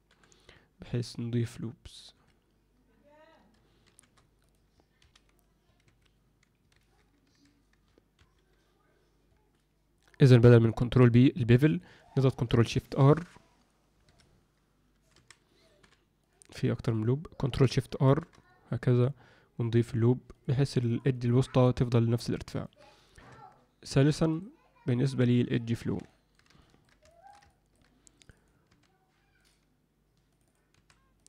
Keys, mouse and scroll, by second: 3.8 ctrl+shift+r, 5.0 ctrl+F9, 5.0 ctrl+F10, 5.8 Escape, 6.8 ctrl+z, 7.2 a, 8.1 ctrl+F9, 8.3 ctrl+F10, 10.1 click, 11.5 click, 12.8 ctrl+shift+r, 15.1 a, 15.8 m, 16.7 click, 18.0 ctrl+shift+r, 20.8 click, 21.0 click, 21.9 alt+middle click, 23.3 Tab, 24.3 click, 24.9 click, 25.8 Tab, 26.0 alt+middle click, 26.6 ctrl+alt+middle drag, 27.0 shift+middle click, 27.4 ctrl+alt+middle click, 28.1 click, 28.3 click, 28.6 s, 30.3 click, 30.4 click, 30.7 s.